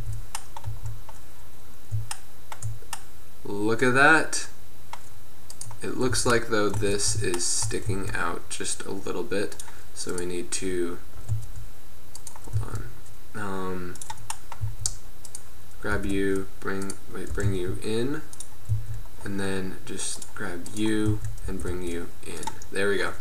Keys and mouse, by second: 0.5 a, 0.8 z, 3.9-4.2 middle drag, 4.4 middle click, 5.7-6.1 right drag, 6.2 z, 6.4 middle click, 7.0 Tab, 7.2 middle click, 9.4 z, 11.2 g, 11.8 click, 12.0 middle click, 12.6 z, 14.1 click, 14.7 z, 16.0 g, 17.4 g, 18.8 z, 20.3-21.0 drag, 21.1 z, 21.5 g.